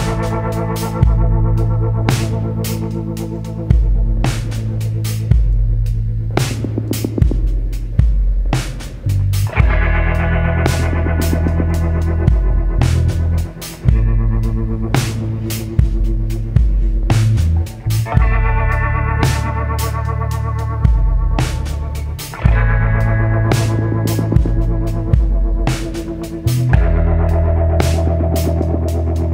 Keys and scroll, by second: 8.0 ctrl+t.